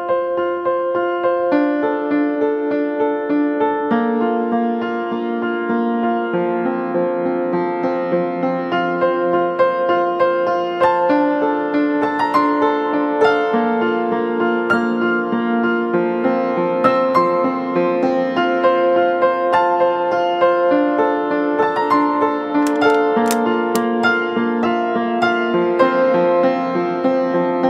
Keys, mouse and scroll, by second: 21.9 ctrl+t, 25.0 Return.